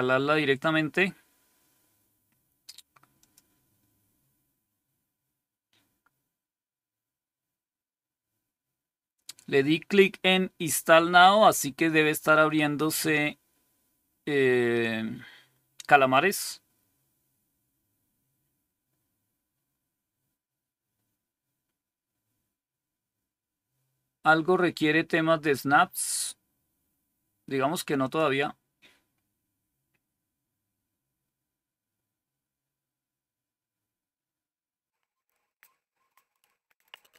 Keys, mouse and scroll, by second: 3.1 click, 27.9 click.